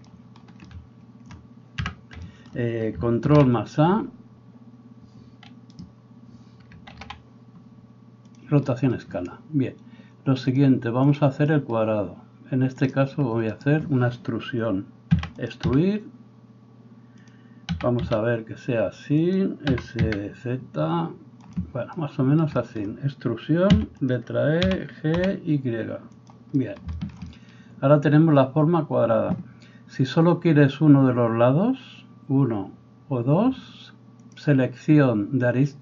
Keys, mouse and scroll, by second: 1.8 n, 3.2 ctrl+a, 7.0 ctrl+a, 10.4-15.6 drag, 13.6 right click, 13.7-34.2 middle drag, 15.1 e, 15.6 s, 17.7 s, 19.7 s, 23.8 e, 24.6 g, 34.2-35.8 drag.